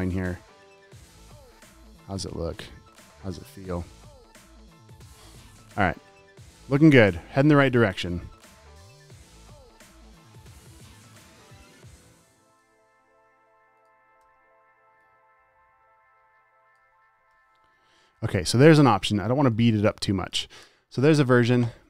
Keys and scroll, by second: 1.4 space, 1.9 alt+super+space, 2.7 super+;, 3.4 space, 3.8 space, 5.9 space, 6.8 space, 8.6 super+;, 9.0 space, 9.5 super+space, 9.7 v, 11.9-12.9 typing, 13.4 super+s, 14.5 super+t, 17.6 v, 18.1 super+s, 20.1 space, 20.5 space.